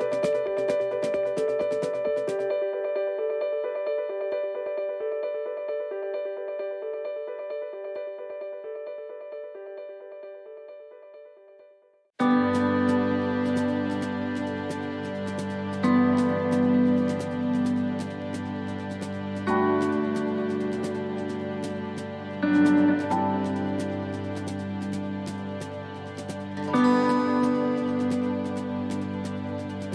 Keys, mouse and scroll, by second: 0.0 s, 1.6 click, 3.2 middle click, 4.0 middle click, 5.2 click, 7.7 r, 9.9 middle click, 11.6 click, 16.2 click, 16.4 alt+s, 20.3-20.6 scroll up 2, 21.0 middle click, 21.0-21.4 scroll up 2, 22.5 s, 28.1 click.